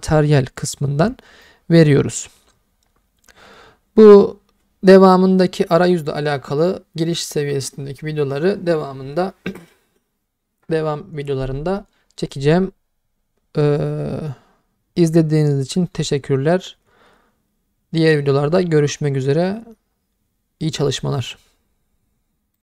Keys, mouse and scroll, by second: 1.4-2.7 middle drag, 18.6-20.8 middle drag.